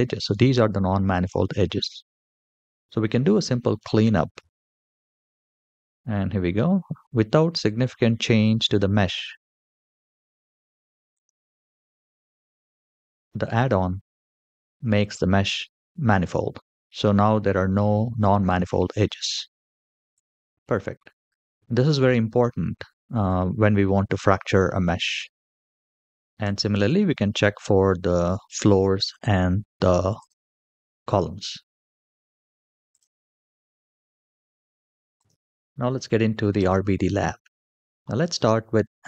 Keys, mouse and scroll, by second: 0.0-1.3 middle drag, 2.4 click, 4.5 click, 5.9-6.9 scroll down 2, 6.9-10.1 middle drag, 10.9 click, 19.9 click, 25.8 click, 26.2 Tab, 28.8 click, 29.9 click, 32.7 click, 33.9 click, 34.9 click, 36.3 click, 37.7 shift+middle click.